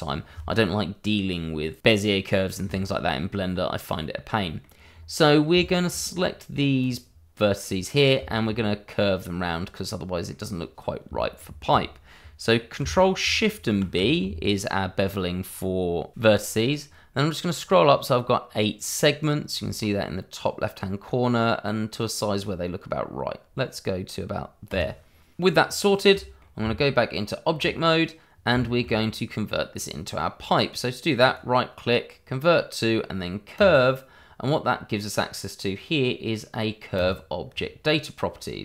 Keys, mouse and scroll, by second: 3.3-3.8 scroll down 1, 3.8 middle click, 4.8-5.2 scroll up 1, 5.2 middle click, 5.6 shift+middle click, 6.1 click, 8.2 shift+middle click, 8.6 middle click, 9.4-9.9 scroll up 1, 9.9 middle click, 11.1 shift+middle click, 13.7 ctrl+shift+b, 17.3 scroll up 1, 24.7 click, 25.6-26.1 scroll down 1, 26.1 middle click, 26.6 Tab, 28.6 shift+middle click, 29.6 middle click, 31.2 right click, 33.5 click, 36.9 click.